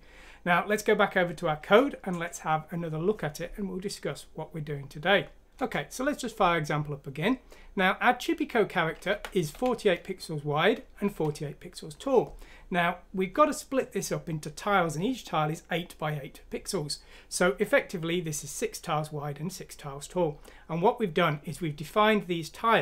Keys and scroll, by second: 5.5 F6, 5.6 Return, 9.1-9.5 typing.